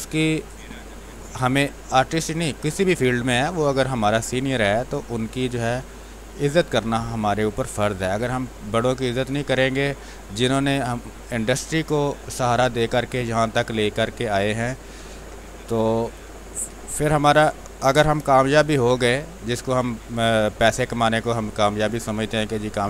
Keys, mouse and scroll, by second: 0.2-5.6 drag, 5.6 space, 5.8 click, 6.1 space, 7.6-12.3 drag, 12.3 space, 12.6 click, 12.8 space, 13.6-15.0 drag, 15.0 ctrl+z, 15.5 click, 16.1-18.7 typing, 16.3 click, 17.1 click, 18.3 click, 19.9-22.3 drag, 22.3-22.8 drag.